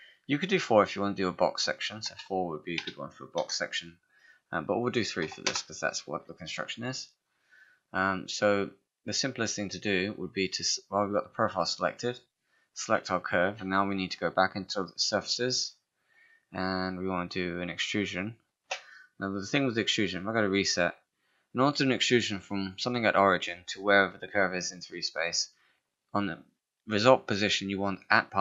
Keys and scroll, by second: 2.1 1, 2.7 4, 2.8 BackSpace, 3.4 Return, 5.2 3, 5.5 Return, 13.7 space.